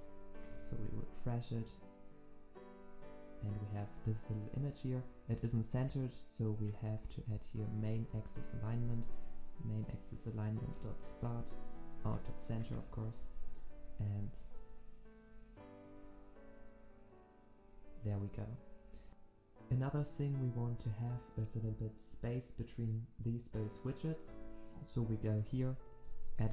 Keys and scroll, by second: 0.8 ctrl+alt+Left, 1.0 ctrl+s, 8.1 Return, 11.9 ctrl+s, 13.5 Return, 14.7 ctrl+s, 19.1 ctrl+s.